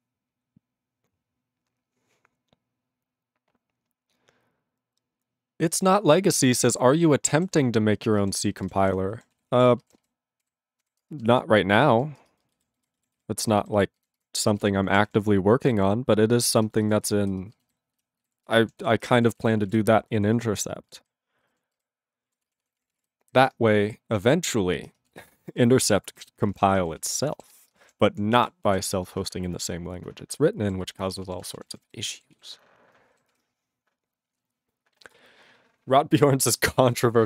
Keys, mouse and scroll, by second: 7.6 ctrl+s, 7.9 ctrl+a, 8.1 ctrl+space, 8.2 ctrl+e, 8.3 ctrl+g, 8.6 ctrl+space, 8.6 ctrl+a, 8.8 ctrl+g, 8.9 ctrl+e, 9.3 ctrl+s, 9.5 ctrl+a, 9.7 ctrl+space, 9.8 ctrl+e, 9.8 ctrl+p, 10.5 ctrl+b, 10.8 ctrl+g, 11.0 ctrl+space, 11.4 ctrl+alt+f, 11.5 ctrl+g, 12.0 ctrl+s, 12.2 ctrl+space, 12.6 ctrl+alt+b, 13.2 ctrl+s, 13.7 ctrl+alt+b, 14.0 ctrl+alt+b, 14.2 ctrl+g, 14.5 ctrl+space, 14.5 ctrl+e, 14.6 ctrl+g, 15.1 ctrl+s, 15.7 ctrl+b, 16.6 ctrl+space, 17.0 ctrl+alt+f, 17.1 ctrl+g, 17.3 ctrl+space, 17.8 ctrl+alt+b, 18.0 ctrl+alt+b, 18.2 ctrl+alt+b, 18.5 ctrl+g, 18.8 ctrl+s, 19.1 ctrl+space, 19.1 ctrl+e, 19.2 ctrl+n, 19.3 ctrl+e, 19.3 ctrl+n, 19.4 ctrl+e, 19.5 ctrl+n, 19.6 ctrl+e, 19.7 ctrl+g, 20.0 ctrl+n, 20.3 ctrl+s, 20.6 ctrl+space, 21.1 ctrl+alt+b, 21.4 ctrl+alt+b, 21.8 ctrl+g, 22.3 ctrl+a, 22.4 ctrl+space, 22.5 ctrl+e, 22.5 ctrl+n, 22.6 ctrl+e, 22.8 ctrl+n, 22.9 ctrl+e, 23.0 ctrl+g, 23.4 ctrl+s, 24.9 ctrl+space, 25.3 ctrl+alt+b, 25.5 ctrl+alt+b, 25.8 ctrl+alt+b, 26.1 ctrl+g, 26.4 ctrl+space, 26.5 ctrl+e, 26.6 ctrl+n, 26.7 ctrl+e, 26.7 ctrl+n, 26.8 ctrl+e, 26.9 ctrl+n, 27.0 ctrl+e, 27.1 ctrl+g, 27.6 ctrl+s, 27.7 ctrl+space, 27.8 ctrl+a, 27.9 ctrl+p, 28.0 ctrl+p, 28.3 ctrl+p, 28.4 ctrl+g, 28.5 ctrl+e, 28.9 ctrl+s, 30.8 ctrl+s, 31.1 ctrl+a, 31.2 ctrl+space, 31.3 ctrl+e, 31.3 ctrl+n, 31.4 ctrl+n, 31.4 ctrl+e, 31.6 ctrl+e, 31.6 ctrl+n, 31.7 ctrl+n, 31.9 ctrl+g, 32.4 ctrl+s, 33.3 ctrl+s.